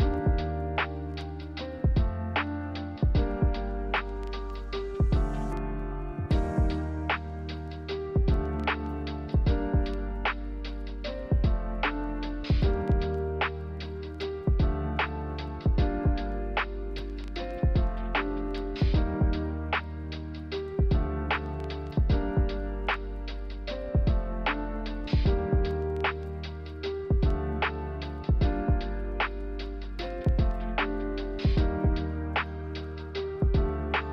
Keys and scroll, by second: 19.6 ctrl+z, 19.7 ctrl+z, 19.9 ctrl+z, 26.4 b, 28.2 z.